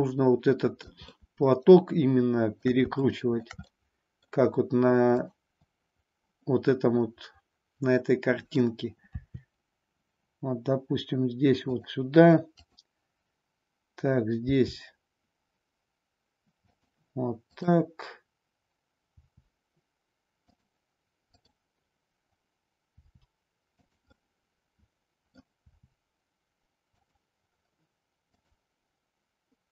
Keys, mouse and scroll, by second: 3.0 shift+middle click, 3.7 middle click, 5.1-6.4 drag, 7.0-8.6 middle drag, 9.1 r, 11.8 click, 12.5-13.6 drag, 14.4 r, 17.5-18.6 drag, 19.0 r, 21.2-22.4 drag, 23.0 r, 24.1-25.4 middle drag, 25.6 r, 28.4-29.5 drag.